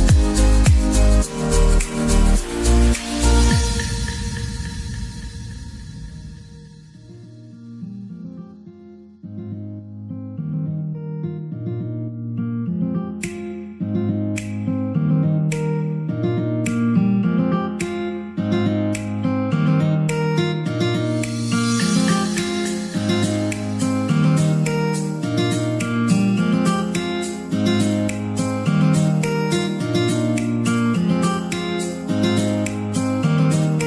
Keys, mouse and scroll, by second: 0.0 click, 0.8 e, 1.9-2.3 scroll down 5, 2.3 shift+middle click, 3.0-3.5 scroll up 2, 3.5 click, 3.7 middle click, 4.3-4.7 scroll up 3, 4.7 middle click, 5.5 e, 6.9 scroll down 3, 7.0-8.9 middle drag, 8.9 Tab, 9.2-10.8 middle drag, 10.8 Tab, 11.6 ctrl+r, 15.7 middle click, 16.4 ctrl+r, 17.8 middle click, 18.7 ctrl+r, 20.2 click, 20.9 click, 21.2 shift+click, 21.6 middle click, 22.3 shift+click, 23.0 shift+click, 23.5-24.4 scroll up 2, 24.4 e, 25.5 s, 27.1 ctrl+z, 27.8 e, 30.2 scroll down 3, 30.5-32.5 middle drag, 32.5 Tab, 32.8 middle click, 33.2 click, 33.5 scroll down 2, 33.7 middle click.